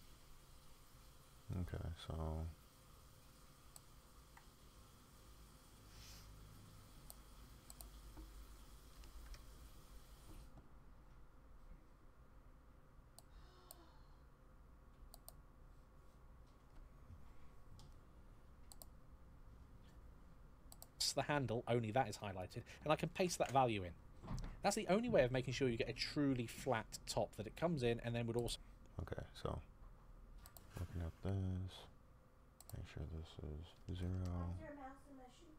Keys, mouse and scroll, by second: 2.0-7.0 scroll up 1, 22.1 click, 22.9 ctrl+v.